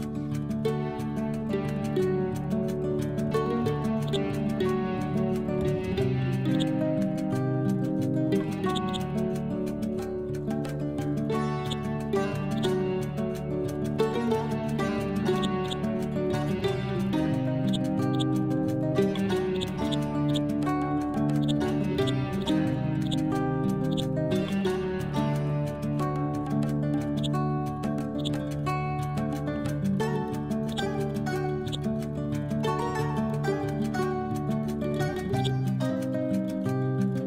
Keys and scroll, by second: 0.2-0.6 typing, 1.0 Return, 9.6 F12, 10.0 4, 10.2 Return, 10.8 ctrl+v, 13.0 ctrl+z, 13.4 F12, 13.9 3, 14.1 Return, 16.6 ctrl+g, 17.9 c.